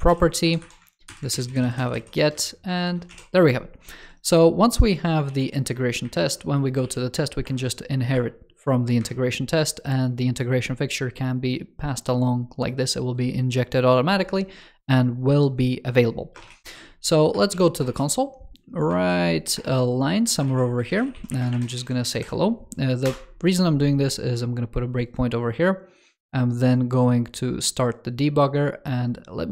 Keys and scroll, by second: 1.2 super+Down, 2.7 ctrl+shift+f, 5.2 super+c, 5.9 shift+super+], 6.7 super+v, 7.3 super+Return, 21.6 super+s, 22.0 super+Left.